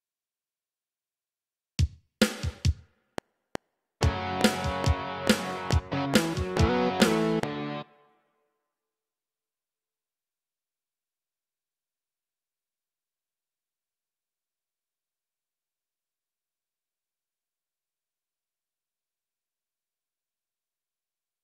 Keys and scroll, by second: 3.0 F7, 7.7 space.